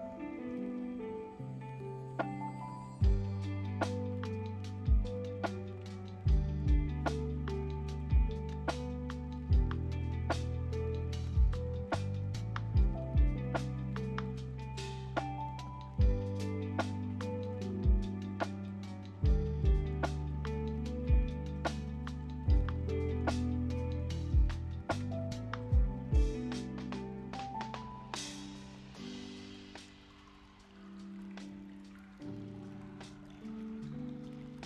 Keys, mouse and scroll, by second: 0.0-1.3 right drag, 1.3 click, 1.6-2.8 middle drag, 2.8 scroll down 3, 3.4-4.9 middle drag, 4.9 click, 7.9 click, 13.8 ctrl+a, 13.9 click, 14.6 Tab, 16.4 ctrl+b, 27.7 click, 28.1 Tab, 28.5 click, 31.5-32.9 drag, 33.5 click.